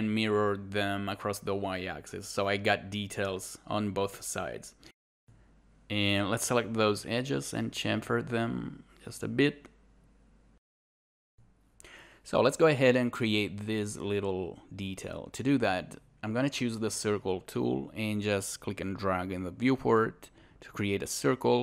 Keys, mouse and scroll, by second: 2.9 scroll up 1, 3.8 alt+click, 5.1 alt+scroll, 5.5 alt+right click, 6.7 shift+click, 8.3 alt+click, 9.7 scroll down 1, 10.2 alt+click, 13.0 scroll down 1, 13.5 alt+click, 14.1 shift+2, 14.4 scroll up 1, 14.8 scroll down 1, 15.4 scroll up 1, 17.6 click.